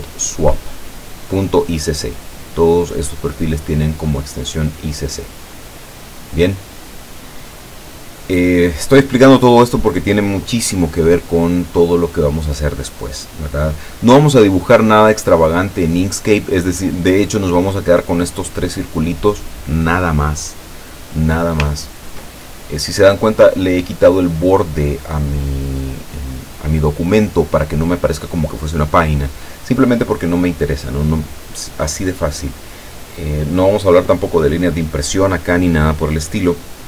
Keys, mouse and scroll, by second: 2.5 click, 16.6-17.7 drag, 17.8-19.1 drag, 20.4 middle click, 21.8 ctrl+scroll down 2, 22.3 ctrl+middle click.